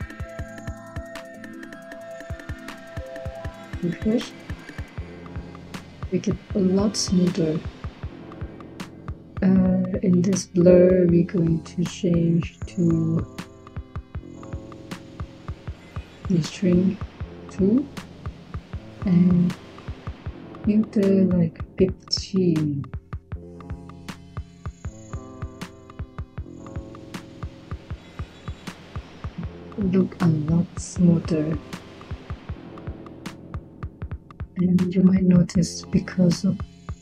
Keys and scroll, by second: 3.1-3.7 typing, 17.2 2, 21.5-22.7 typing, 25.4-26.4 typing.